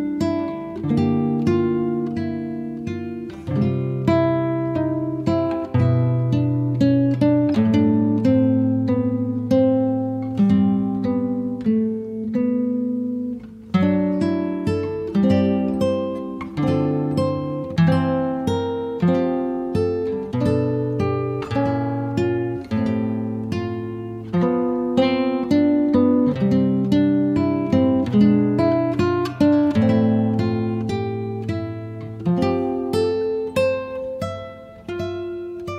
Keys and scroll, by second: 2.0 space, 8.4 m, 12.8 KP_Multiply, 13.1 2, 13.5 Return.